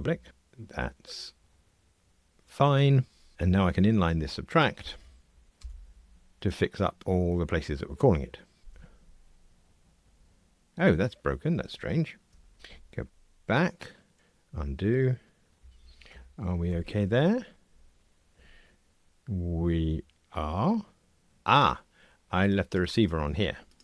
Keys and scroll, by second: 0.3 ctrl+r, 6.0 alt+super+n, 8.6 ctrl+r, 14.1 super+[, 16.7 ctrl+r.